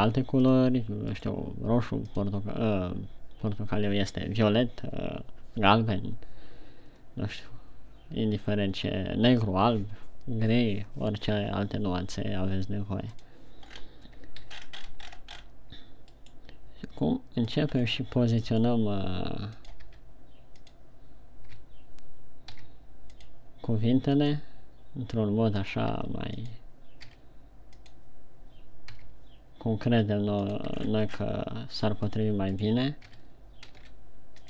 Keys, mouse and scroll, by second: 1.7 right click, 2.5 click, 14.1-14.9 scroll down 5, 14.9-16.0 shift+scroll up 17, 16.7 right click, 18.4 scroll down 2, 18.9 right click, 19.1 right click, 20.1 click, 20.2 r, 21.1 click, 22.9 g, 23.8 click, 24.5 right click, 24.7 right click, 26.2 click, 26.4 r, 27.0 click, 27.5 g, 28.3 click, 29.4 g, 31.2 click, 31.3 shift+scroll down 5, 32.4 right click, 32.7 shift+right click, 33.1 right click, 33.5 g.